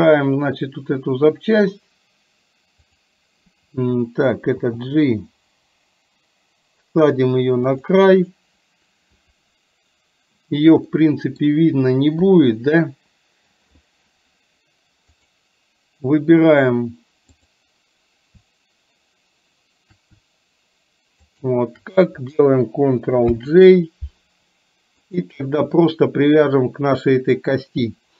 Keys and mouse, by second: 4.6 g, 11.0 middle click, 12.3 KP_3, 15.3 click, 17.4 click, 21.3 shift+click, 23.4 ctrl+j, 25.1 click.